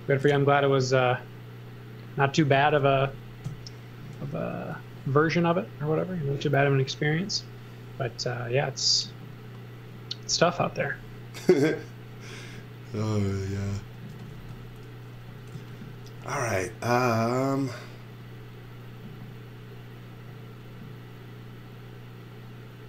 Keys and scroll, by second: 2.4 space, 3.5 BackSpace, 4.5 BackSpace, 4.7 z, 5.9 x, 6.9 z, 8.2 x, 10.1-11.1 typing, 12.8-14.4 typing, 15.6 z, 16.2 a.